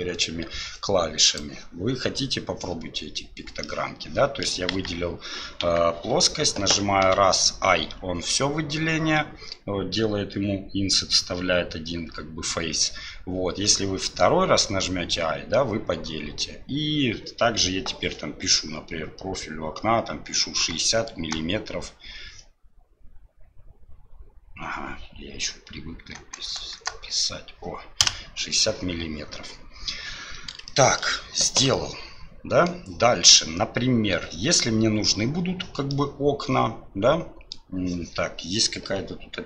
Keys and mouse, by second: 1.3-3.6 drag, 3.6 middle click, 4.7 KP_1, 5.6 KP_3, 7.0 i, 30.8 shift+click, 31.7 click, 35.9-37.6 drag.